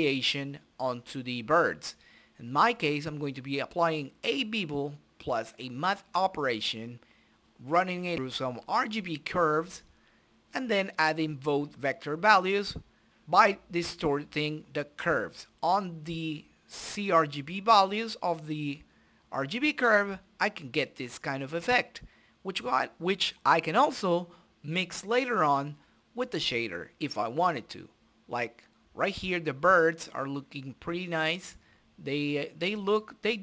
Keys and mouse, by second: 0.2-1.5 drag, 2.8 click, 4.1 middle click, 5.1 middle click, 5.5 click, 5.6 middle click, 5.7 shift+a, 6.3 s, 7.4-8.6 drag, 8.1 middle click, 8.8 click, 9.4 middle click, 9.5 click, 10.3 middle click, 11.9 click, 13.3 click, 15.0 click, 19.2 middle click, 24.6-26.5 drag, 28.3 middle click, 28.9 click, 30.5 middle click, 31.2-32.8 drag, 33.3-33.4 drag.